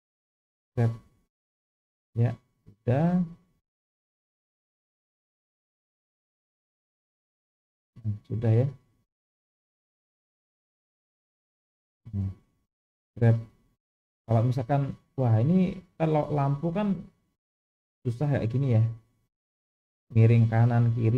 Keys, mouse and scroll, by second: 0.0 click, 0.9 g, 4.8 click, 5.0 g, 11.3-12.5 middle drag, 13.1 g.